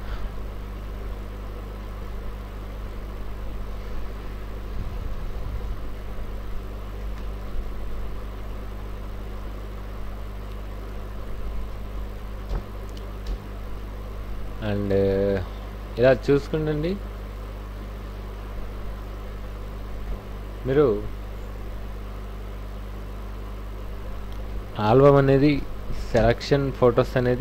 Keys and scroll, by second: 7.0 ctrl+a, 7.3 ctrl+c, 7.4 ctrl+w, 11.5 w, 11.9 ctrl+shift+v, 12.5 ctrl+alt+shift+Tab, 15.8 Right, 20.1 alt+Tab, 24.5 alt+i, 24.6-25.6 typing, 24.9 Return, 26.1 Return, 26.9 f.